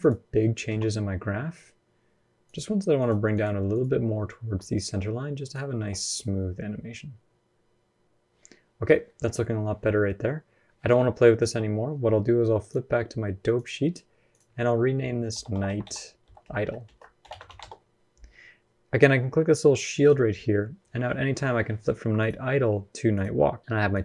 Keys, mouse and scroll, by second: 0.5 g.